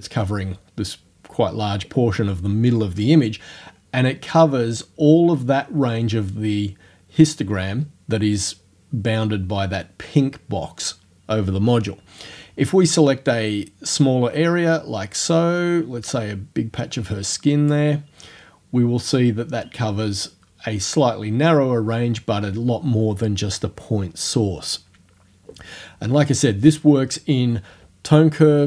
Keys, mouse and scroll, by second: 13.3-17.9 drag, 17.9-21.9 middle drag.